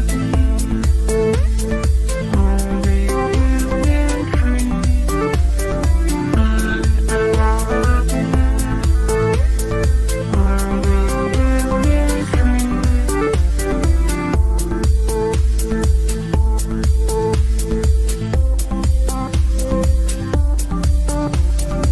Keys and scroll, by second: 2.0 ctrl+Page_Down, 2.9 F3, 3.5 Escape, 7.4 shift+F2, 7.8 Escape, 8.7 F3, 9.1 Escape, 15.1 shift+F2, 15.5 F9.